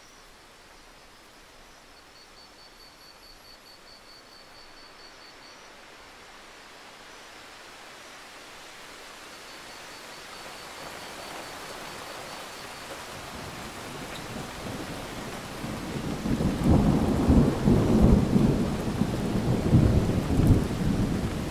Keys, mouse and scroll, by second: 1.8 alt+click, 3.5 ctrl+z, 3.9 click, 5.7-6.6 scroll up 2, 6.6 click, 10.2-10.7 scroll up 1, 10.7 click, 13.2 right click, 13.9 click, 14.5-15.7 scroll down 1, 15.7 click, 15.9 right click, 16.9 click, 17.3-19.2 scroll down 1, 19.2 click, 20.0 alt+scroll up 1, 20.9 click.